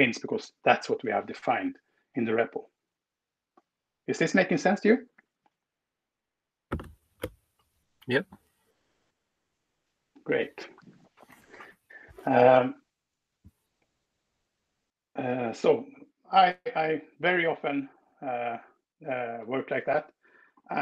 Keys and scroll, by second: 13.3 Escape.